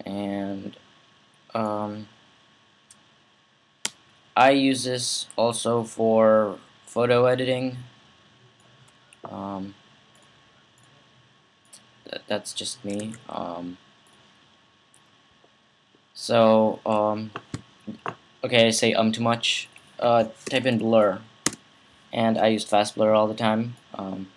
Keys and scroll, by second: 12.8 super+z, 20.0-21.2 typing.